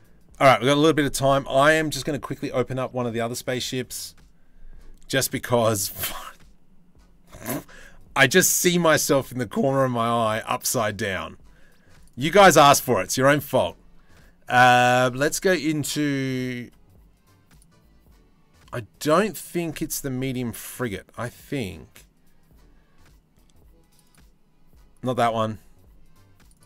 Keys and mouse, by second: 1.4 ctrl+s.